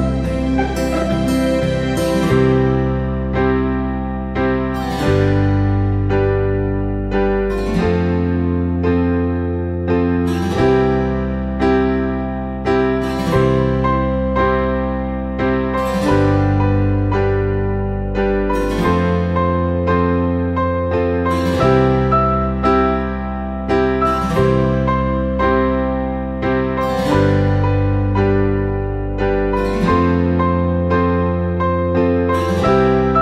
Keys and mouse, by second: 1.1-1.4 drag, 12.5 KP_3, 16.7 KP_1, 19.3 g, 21.5 KP_3, 22.2 shift+middle click, 22.8 alt+z, 23.2 shift+middle click, 24.0 s, 25.3 g, 26.8 c, 28.5 r, 31.4 g.